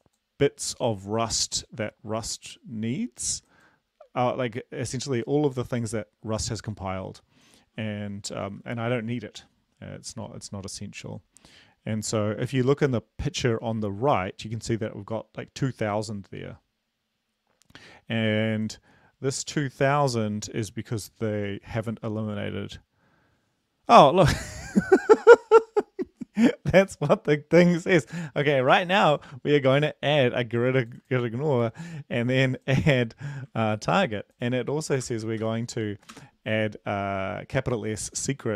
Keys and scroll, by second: 34.1 ctrl+c, 35.1 Return, 35.6 ctrl+v, 37.0 Return.